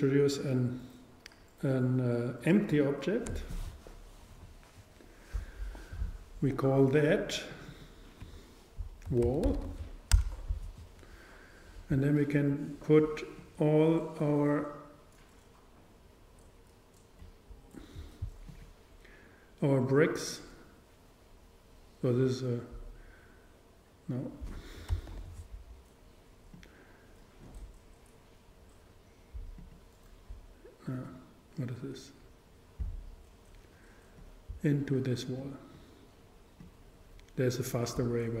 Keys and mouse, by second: 6.9-9.7 drag, 9.7 l, 12.5-15.2 drag, 21.2 click, 25.3 super+z, 26.6-28.5 drag, 31.8-34.5 drag, 35.4-38.4 drag.